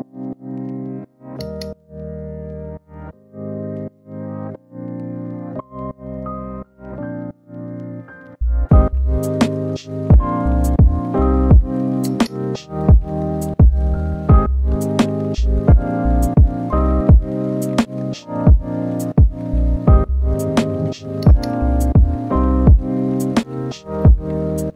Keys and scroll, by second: 11.9 ctrl+z.